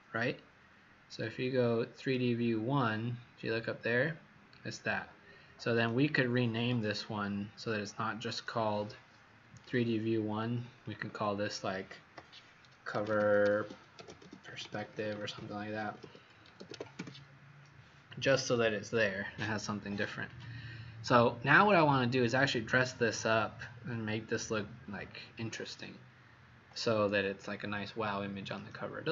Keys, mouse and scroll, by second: 10.8 click, 12.6-17.2 typing, 18.2-18.9 typing, 20.3 click, 22.1 scroll down 1, 23.3-23.9 scroll up 1, 24.4 scroll up 1, 25.7 scroll down 1.